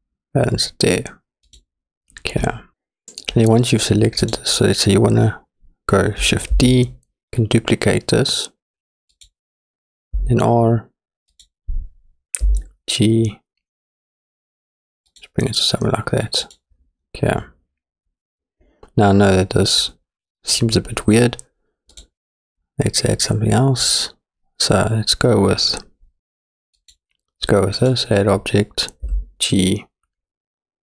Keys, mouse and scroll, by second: 1.5 click, 2.8 click, 4.3 click, 6.6 shift+d, 10.2 r, 12.4 g, 16.4 click, 22.0-26.9 drag, 27.8 click, 29.1 g.